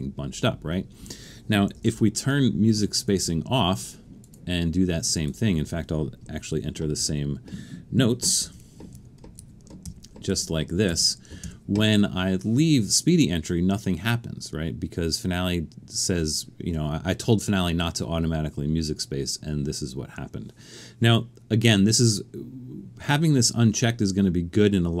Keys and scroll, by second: 1.9 super+,, 6.5-7.0 typing, 8.3-11.4 typing.